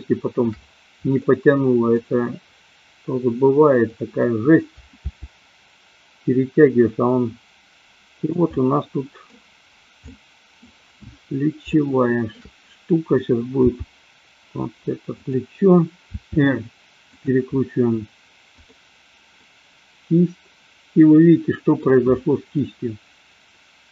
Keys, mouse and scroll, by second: 1.2-1.9 middle drag, 3.7 click, 4.9 g, 8.3 click, 8.7-9.3 middle drag, 10.1 middle click, 11.7 shift+middle click, 13.7 g, 16.1 r, 17.2 drag, 18.4-19.2 drag, 19.3-21.9 middle drag, 22.6-23.8 middle drag.